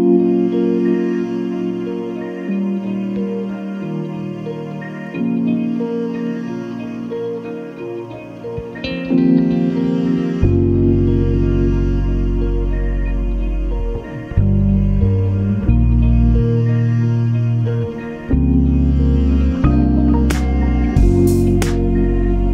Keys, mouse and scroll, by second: 0.3 click, 2.3-2.6 scroll up 2, 3.2-3.5 scroll up 2, 4.0 space, 6.0-7.3 ctrl+shift+drag, 7.6-9.6 ctrl+shift+drag, 9.9 ctrl+d, 10.2-12.5 ctrl+drag, 12.7-13.7 ctrl+scroll down 6, 14.2 ctrl+space, 17.8 click, 20.6-22.5 drag.